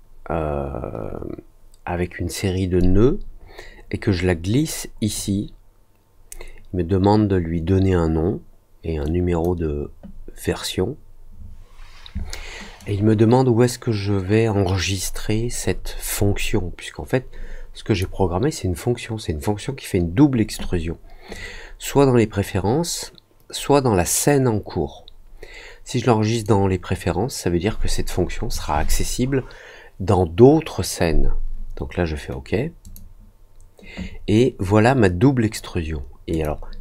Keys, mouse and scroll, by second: 2.7-5.1 drag, 9.0 click, 12.7 click, 21.3-26.4 drag, 32.8 click, 36.3 click.